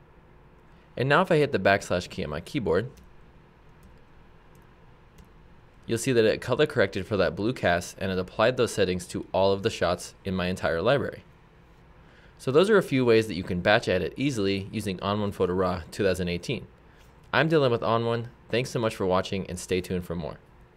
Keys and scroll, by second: 2.9 \, 3.9 \, 5.3 \.